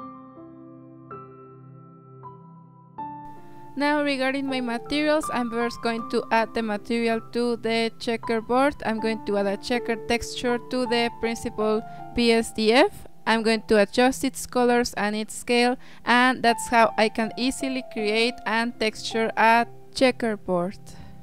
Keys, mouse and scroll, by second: 0.0 click, 0.4-0.9 middle drag, 0.9 KP_0, 1.4-2.9 scroll up 1, 3.7-4.9 drag, 4.9 shift+a, 6.7 click, 7.9-8.9 drag, 9.6 z, 12.4-14.7 drag, 17.6-19.8 drag.